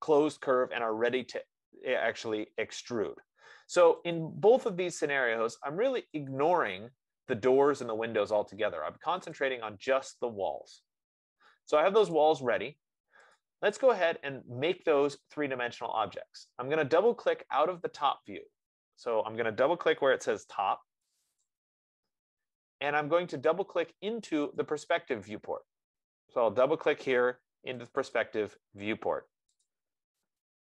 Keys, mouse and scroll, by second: 4.4 click, 6.7 click, 9.7 click, 12.5 click, 21.5 click, 22.1 click, 24.9 click, 28.2 click, 28.7 click.